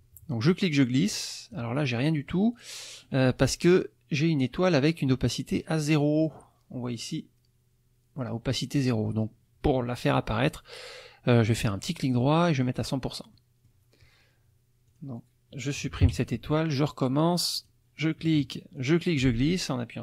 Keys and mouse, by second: 0.5-1.7 drag, 11.8 right click, 12.5 click, 13.3 middle click, 14.9 click, 16.0 Delete, 17.6 click, 18.8-20.0 drag.